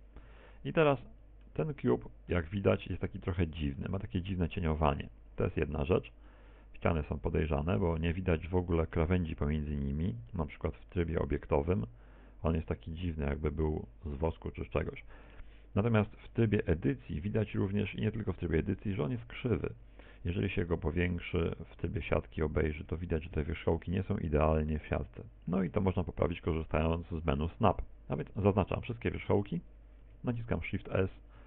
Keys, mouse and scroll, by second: 0.0 right click, 0.5 shift+right click, 1.0 right click, 1.5 right click, 1.9 f, 2.2 a, 2.8 middle click, 3.6 z, 4.0 middle click, 4.6 middle click, 5.4 middle click, 11.8 Tab, 12.3 middle click, 17.8 middle click, 18.6 Tab, 19.0 middle click, 20.0 KP_1, 21.6 scroll up 4, 22.1 shift+middle click, 22.8-23.6 scroll up 1, 23.6 scroll up 1, 23.8 z, 25.0 shift+middle click, 25.9 scroll up 2, 27.4 scroll down 4, 28.0 shift+middle click, 28.7-29.2 scroll down 2, 30.5 a.